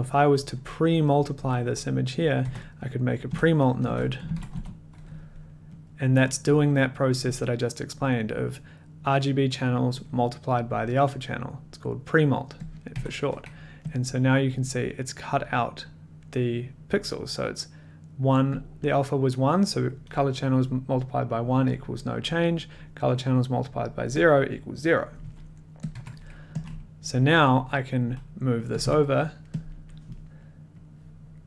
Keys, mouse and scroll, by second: 0.0 click, 2.2 click, 2.4 Tab, 3.0-5.0 typing, 5.1 click, 5.8 click, 6.8 click, 7.4 click, 7.4 scroll, 12.8 click, 12.9 1, 14.0 click, 14.0 scroll, 18.8 click, 23.8 click, 24.3 click, 25.9 click, 25.9 1, 26.6 click, 26.7 middle click, 27.6 middle click, 28.8 click, 28.8 t, 29.6 click, 29.6 middle click, 30.2 middle click, 30.7 click.